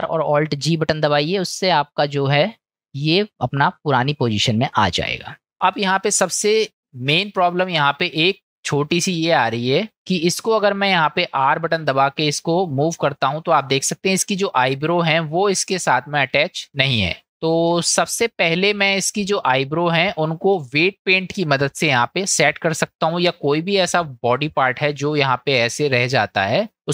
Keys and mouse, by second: 0.1 alt+r, 0.7 alt+g, 1.6 middle click, 2.1 click, 2.7 middle drag, 4.3-4.8 middle drag, 5.5 ctrl+z, 5.7 middle click, 6.7-7.0 shift+middle drag, 7.4-7.8 middle drag, 8.8 middle click, 10.0-10.5 middle drag, 17.1 click, 17.8 ctrl+z, 18.8-19.4 middle drag, 22.9-24.1 middle drag, 25.3 middle click, 26.7 middle click.